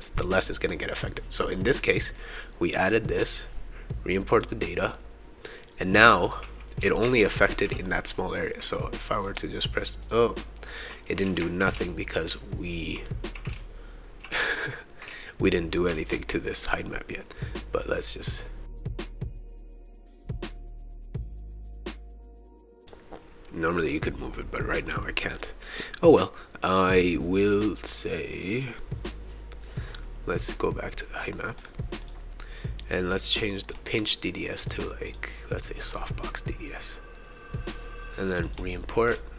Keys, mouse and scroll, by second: 0.9 click, 3.2 click, 4.3 click, 6.0-7.7 right drag, 6.8 w, 7.2 shift+e, 9.2 click, 10.0 click, 10.9 right click, 11.2 w, 11.7 shift+e, 12.2 shift+a, 13.3-15.8 shift+right drag, 13.5 shift+s, 14.3 shift+a, 15.1 shift+d, 17.8-18.9 drag, 19.0-21.8 typing, 19.0 click, 19.2 shift+right click, 20.1 right click, 20.5 shift+right click, 21.1 click, 21.2 shift+right click, 21.9 click, 22.7 right click, 22.8 click, 31.6 click, 32.0 click, 33.7 click, 34.7 click, 35.1 click, 35.7 click, 38.4 click, 39.1 click.